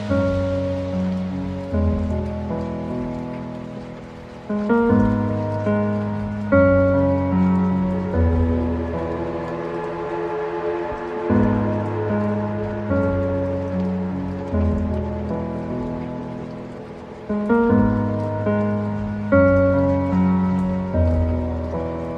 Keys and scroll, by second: 5.4 ctrl+z, 9.3 ctrl+z, 12.9 ctrl+z, 21.3 ctrl+z.